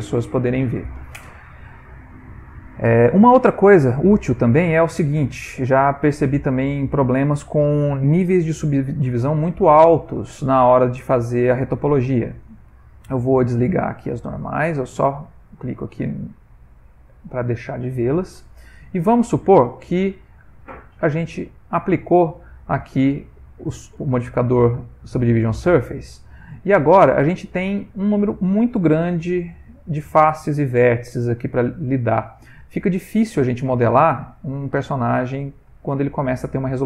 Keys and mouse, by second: 3.3 middle click, 3.9 ctrl+middle click, 4.4 middle click, 5.0 ctrl+middle click, 5.5 middle click, 6.3 ctrl+middle click, 6.9 middle click, 9.1 middle click, 9.3 ctrl+middle click, 10.1 Tab, 10.8 middle click, 12.2 Tab, 12.9 Tab, 13.4 click, 16.2 middle click, 18.8 Tab, 20.8 click, 22.8 middle click, 24.4 Tab, 24.8 middle click, 25.4 ctrl+middle click, 26.1 middle click, 26.7 ctrl+middle click, 27.5 middle click, 27.9 shift+middle click, 29.0 click, 29.6 middle click, 32.0 ctrl+middle click, 32.4 middle click, 32.7 shift+middle click, 32.8 shift+middle click, 33.2 middle click, 34.2 middle click, 35.8 shift+middle click.